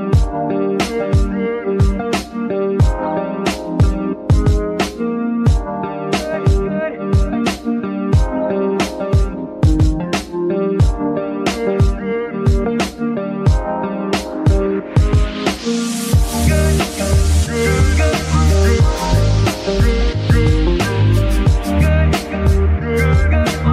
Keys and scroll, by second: 0.3 z, 0.6 z, 2.5 g, 3.3 z, 3.9 g, 12.0 ctrl+alt+shift+s, 12.4 ctrl+alt+shift+Escape.